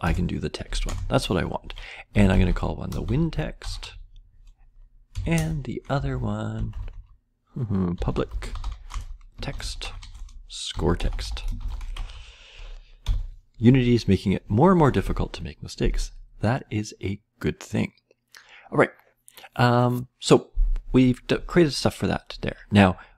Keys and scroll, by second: 0.0 shift+Return, 1.8-13.0 typing.